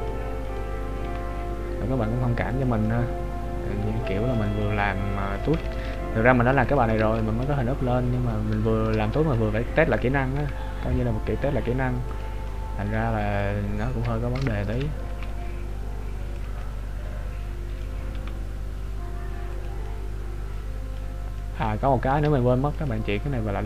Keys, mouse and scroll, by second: 0.7 right click, 1.1 g, 2.9 middle click, 4.6 right click, 7.7 ctrl+z, 8.6 shift+middle click, 9.3 middle click, 10.4 g, 12.5 middle click, 14.5 shift+middle click, 15.3 g, 16.8 middle click, 18.3 g, 19.9 middle click, 23.0 click.